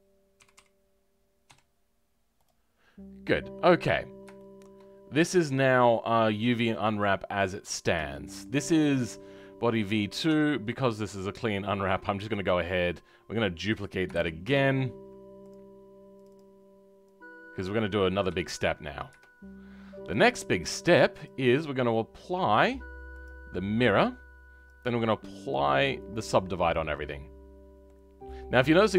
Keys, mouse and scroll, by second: 7.0-10.2 middle drag, 10.2 Tab, 12.2-14.1 right drag, 14.1 shift+d, 15.4 click, 27.8-28.9 middle drag.